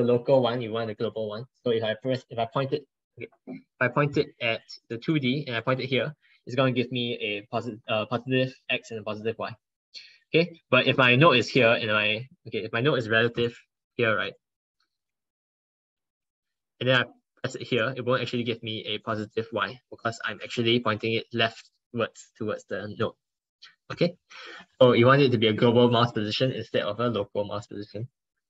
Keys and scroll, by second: 23.8 ctrl+z.